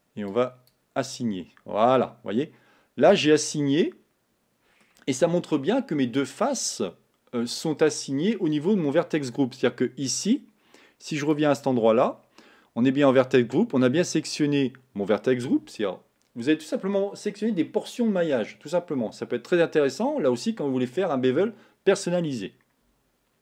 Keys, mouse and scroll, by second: 1.0 click, 1.9-4.9 middle drag.